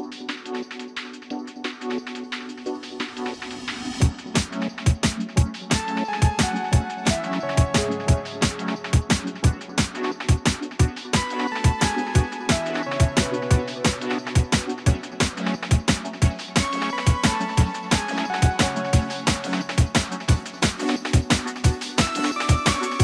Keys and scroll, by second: 4.7 l, 11.9 space, 17.9 shift+s.